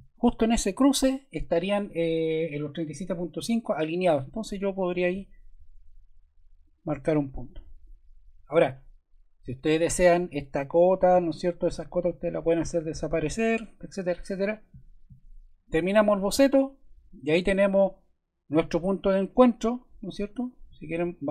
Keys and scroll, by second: 9.4 Escape, 12.2 BackSpace.